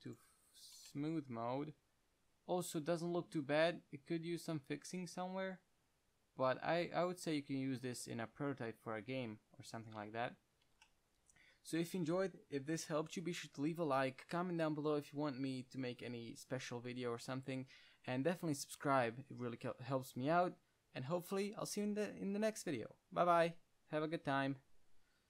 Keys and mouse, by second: 1.1 Tab, 1.2-2.1 middle drag, 10.4 Tab, 10.9 Tab, 11.1-14.2 middle drag.